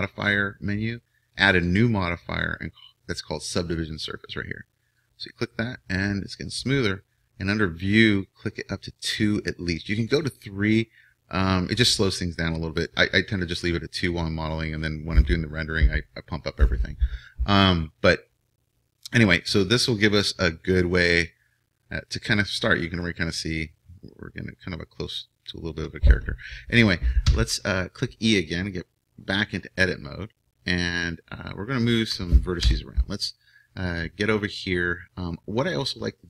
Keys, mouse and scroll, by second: 1.8-5.0 drag, 8.7-18.4 drag, 18.4-19.6 middle drag, 27.3 Tab, 32.6 KP_1.